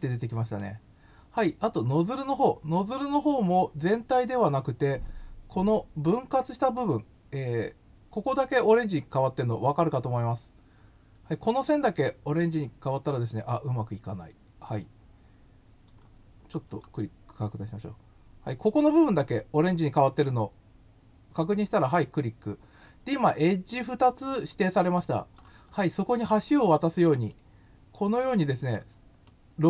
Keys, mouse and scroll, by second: 0.6 middle click, 16.0 scroll up 1, 16.3-16.7 scroll down 3, 21.7 click, 25.0 scroll down 1, 25.3-26.1 scroll up 9, 27.2-28.7 middle drag, 29.2 middle click.